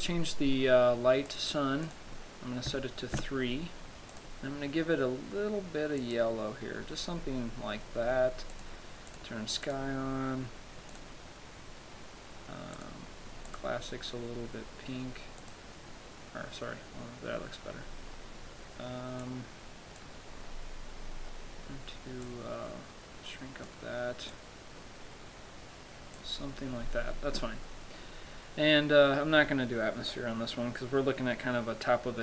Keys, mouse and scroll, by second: 1.6 click, 2.2 click, 4.5 click, 7.4-8.9 scroll down 5, 8.9 click, 9.4 click, 10.0 click, 10.4-11.2 scroll up 4, 11.2 click, 13.0 click, 13.7 click, 17.6-19.3 scroll down 2, 19.3 scroll down 1, 19.5 click, 20.7 scroll down 1, 21.0-21.6 scroll up 2, 22.5 click, 24.6 click, 27.9-29.5 scroll down 1, 29.6-30.0 scroll down 2.